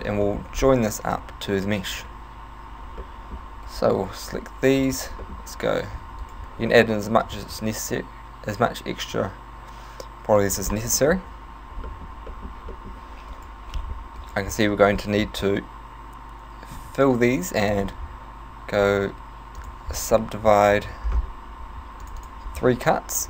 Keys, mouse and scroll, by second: 0.3 shift+middle click, 0.6-1.0 scroll up 3, 2.0 right click, 3.0 middle click, 3.8 alt+right click, 4.8 alt+shift+right click, 5.2 middle click, 6.0 e, 6.4 right click, 7.1 s, 10.6 click, 10.8 middle click, 11.9 middle click, 12.4 shift+middle click, 12.7 middle click, 13.4 right click, 14.2 shift+right click, 16.8 f, 17.8 w, 21.1-21.8 scroll up 6, 22.0 click, 22.2 click.